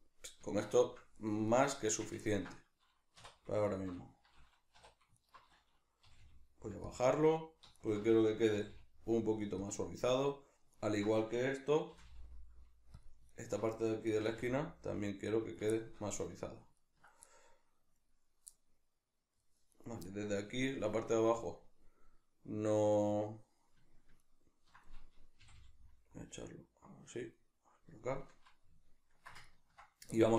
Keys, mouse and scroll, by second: 1.8 Tab, 3.2 3, 3.6 alt+right click, 4.8 2, 5.2 alt+right click, 6.0 g, 7.0 click, 7.8 alt+right click, 8.6 g, 9.7 click, 10.8 alt+right click, 11.9 g, 13.0 click, 13.3 alt+right click, 14.2 g, 15.5 click, 15.7-19.7 shift+middle drag, 19.7 right click, 20.0-24.2 middle drag, 24.2 ctrl+right click, 25.4 g, 26.6 click, 27.3-30.3 middle drag.